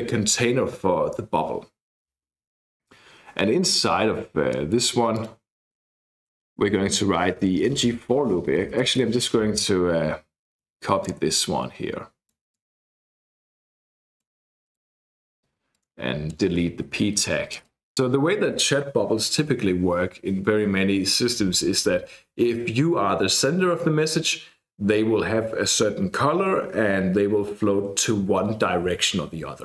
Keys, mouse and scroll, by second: 5.1 click, 5.8-7.2 typing, 7.5 Escape, 7.7 Escape, 8.5 BackSpace, 8.8 BackSpace, 11.0-12.3 drag, 12.5-14.5 drag, 14.6 click, 15.7-16.7 drag, 17.2 BackSpace, 17.5 click.